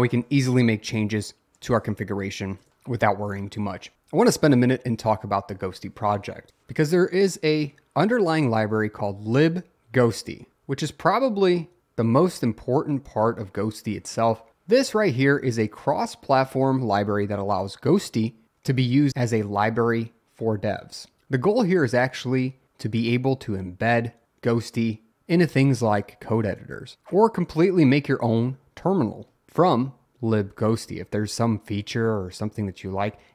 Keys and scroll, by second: 0.8 Up, 2.1 Up, 2.6 Return.